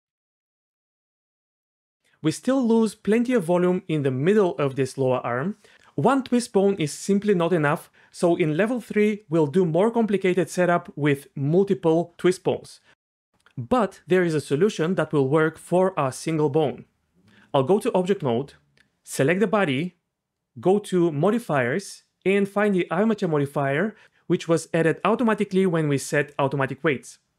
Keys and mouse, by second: 0.1 alt+r, 0.7 y, 8.2 r, 8.2 y, 17.4 Tab, 21.3 click.